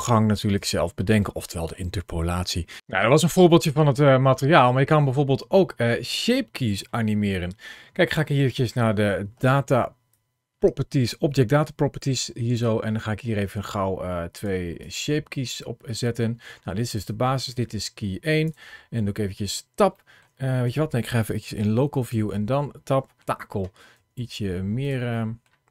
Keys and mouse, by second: 3.7 shift+middle click, 4.6-6.7 middle drag, 8.2 click, 9.7 ctrl+shift+a, 14.2 click, 14.6 click, 16.8 click, 17.2 click, 18.4 Tab, 18.7 shift+middle click, 18.8 Tab, 19.0 KP_Divide, 19.1 Tab, 19.6 middle click, 19.9 alt+z, 20.1 click, 20.8 alt+z, 21.2 o, 21.3 middle click, 21.8 r, 22.0 click, 23.1 g, 23.4 click, 23.8 alt+z, 23.8 click, 24.3 g, 24.8 middle click, 25.1 click, 25.2 g, 25.4 click, 25.4 middle click.